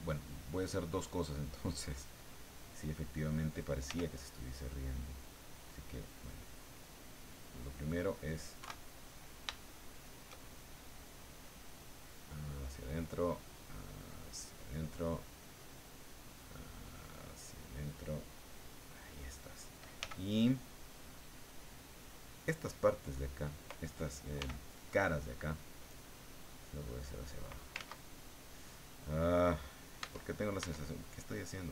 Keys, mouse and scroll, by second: 0.9 click, 1.6 click, 2.5 click, 3.9 f, 4.9 click, 6.0-7.9 drag, 8.6 KP_1, 9.5 shift+click, 11.2-12.6 drag, 13.4-14.9 drag, 15.7 click, 16.2-19.2 drag, 20.0 f, 22.0 click, 24.4 f, 25.2 click, 26.6-27.7 drag, 27.7 ctrl+z, 30.0 Tab, 31.3-31.7 drag.